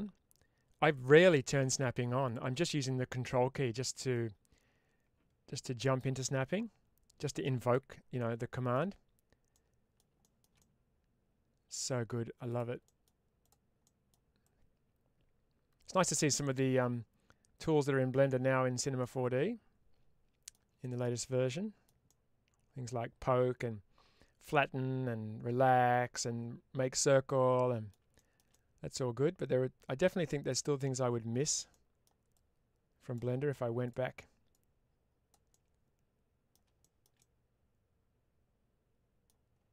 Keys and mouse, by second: 4.0-5.9 drag, 6.1-7.6 middle drag, 8.0 middle click, 9.4 middle click, 10.1 shift+middle click, 12.3 click, 12.7 middle click, 13.3 click, 13.7 middle click, 14.4-18.6 drag, 18.9-20.4 middle drag, 20.7 shift+middle click, 21.6 middle click, 22.0-27.8 middle drag, 28.0 shift+middle click, 31.6 middle click, 32.2 click, 34.4 click, 35.4-36.4 middle drag, 36.7 shift+middle click, 37.0-39.1 middle drag.